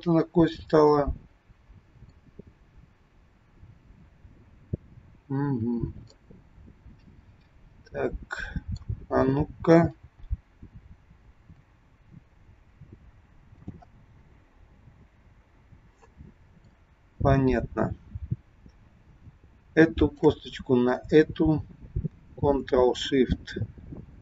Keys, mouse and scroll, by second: 0.9 middle click, 6.1 middle click, 9.9 g, 11.3 g, 13.9 middle click, 20.0 shift+click.